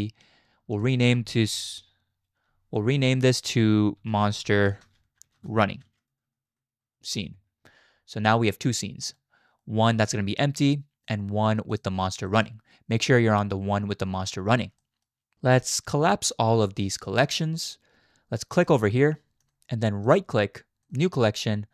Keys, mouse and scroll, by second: 0.8-7.1 drag, 6.2 n, 8.3 click, 9.6 middle click, 12.3 middle click, 14.8 middle click, 17.0 click, 20.1-21.7 drag.